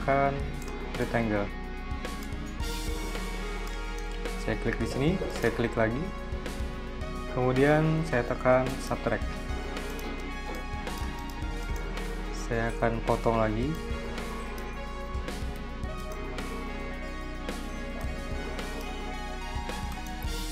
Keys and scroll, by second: 12.6 m, 14.7 v, 15.9 m, 18.6 v.